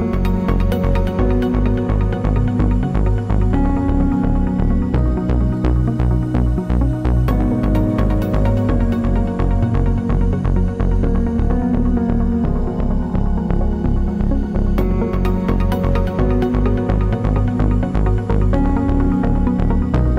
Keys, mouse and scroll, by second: 0.4 g, 1.1 click, 2.2-2.7 scroll down 1, 2.7 click, 4.2 ctrl+j, 5.5 ctrl+[, 7.1-7.8 typing, 8.3 click, 12.5 click, 20.1 KP_2.